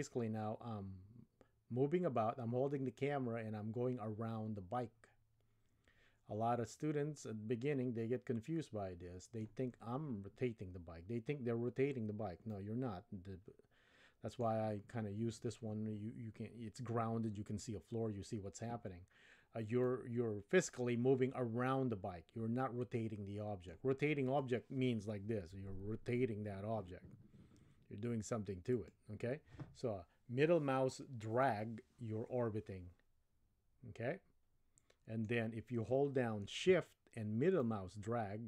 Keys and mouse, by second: 12.5-14.4 middle drag, 19.9-23.8 middle drag, 24.3 click, 25.5 r, 31.4-35.4 middle drag, 37.6-38.4 shift+middle drag.